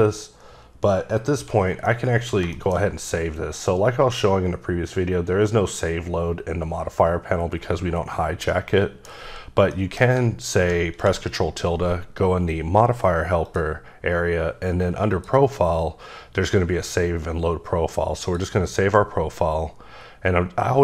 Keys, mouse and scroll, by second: 1.8 middle click, 3.9-4.4 scroll down 2, 6.4-7.8 scroll up 3, 8.5 middle click, 9.7 middle click, 13.4 click, 15.1 click, 18.2 click, 19.9-20.4 scroll down 3.